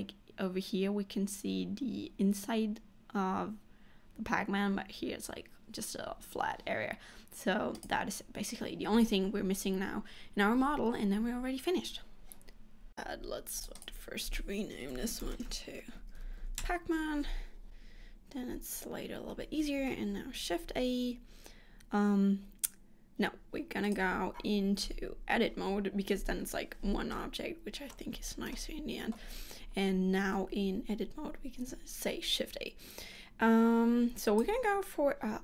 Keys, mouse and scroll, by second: 12.9 middle click, 19.9 shift+a, 23.9 click, 25.0 Tab, 27.2 middle click, 28.2 scroll up 2, 28.6 shift+middle click, 30.3 shift+a.